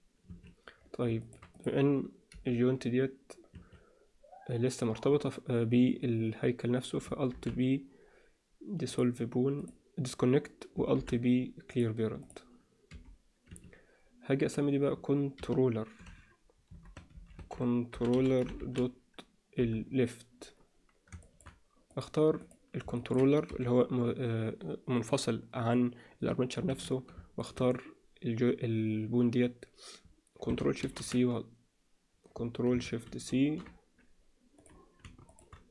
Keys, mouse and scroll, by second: 1.2 shift+middle click, 1.5 click, 2.3 g, 7.3 alt+p, 9.6 click, 11.0 alt+p, 12.2 click, 12.9 g, 15.4 F2, 21.2 shift+middle click, 21.9 click, 22.4 click, 23.0 ctrl+alt+middle click, 23.5 g, 27.4 shift+click, 30.8 ctrl+shift+c, 33.0 ctrl+shift+c, 34.6 click, 35.2 shift+click.